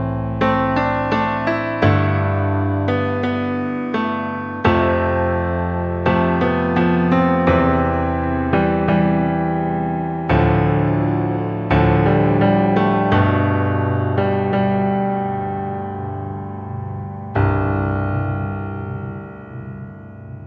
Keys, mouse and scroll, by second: 0.1 click, 1.1 r, 2.6 KP_3, 3.5 KP_1, 4.0 KP_Decimal, 5.4 click, 5.9 KP_3, 7.7 KP_1, 8.5-9.6 shift+middle drag, 9.6-10.1 scroll up 1, 10.1 click, 10.9 Tab, 12.5-12.9 scroll up 4, 13.0-14.6 shift+middle drag, 14.6 Tab, 15.7 shift+d, 18.1 drag, 18.5 click, 19.2 g.